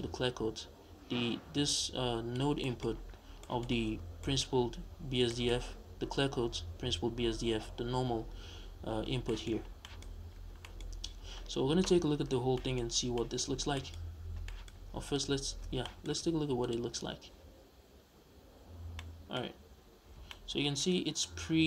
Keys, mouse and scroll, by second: 2.6-16.6 middle drag, 2.8-3.4 scroll up 2, 4.0 scroll down 2, 5.6-6.7 scroll up 2, 6.7-9.1 scroll up 1, 9.1 scroll down 2, 9.6 scroll down 2, 10.1-10.6 scroll up 2, 10.6-11.2 scroll up 2, 12.0-12.5 scroll down 1, 13.0 scroll down 1, 13.4 scroll up 1, 14.0 scroll up 1, 14.8-15.8 scroll up 1, 16.6 ctrl+shift+click, 19.0-21.6 middle drag, 19.6-19.9 scroll up 2.